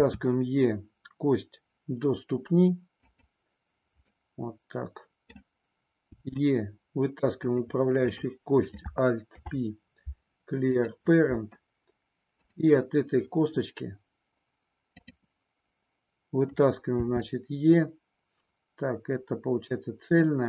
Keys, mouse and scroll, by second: 3.1 click, 4.2-5.4 middle drag, 6.2 e, 9.3 alt+p, 12.3 click, 14.9 click, 17.1 e.